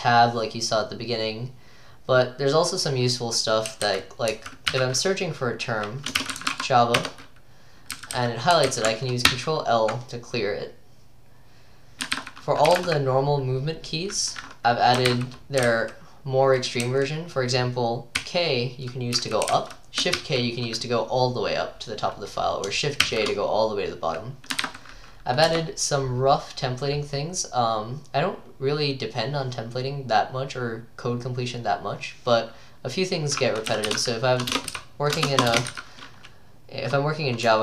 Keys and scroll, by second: 3.5-4.8 typing, 6.0-9.8 typing, 12.5-13.3 typing, 15.1-20.2 typing, 23.1-25.1 typing, 25.5 Return, 27.7-28.4 typing, 33.5-35.7 typing.